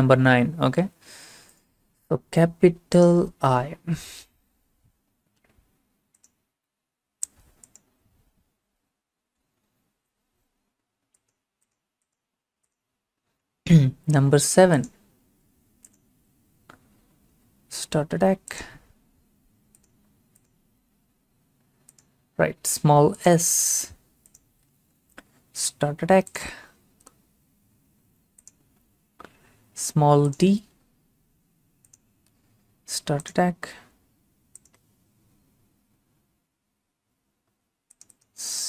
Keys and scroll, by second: 4.3 l, 17.3 7, 25.6 s, 32.3 d.